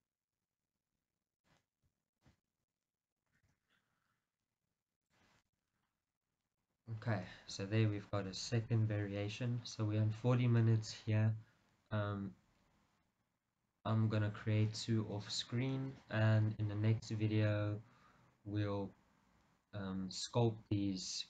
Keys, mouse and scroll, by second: 1.6 click, 2.3 alt+click, 2.9 middle click, 3.5 g, 5.3 click, 5.6 Tab, 5.9-6.3 scroll down 1, 6.3-21.2 middle drag, 7.2-8.4 scroll down 1.